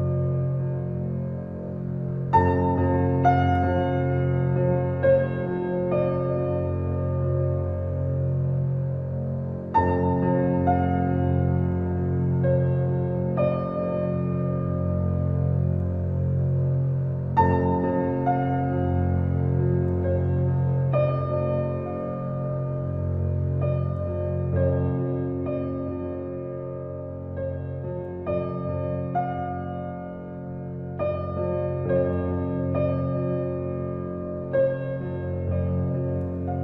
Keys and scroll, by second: 3.4 Return, 24.7 0, 26.1 shift+0.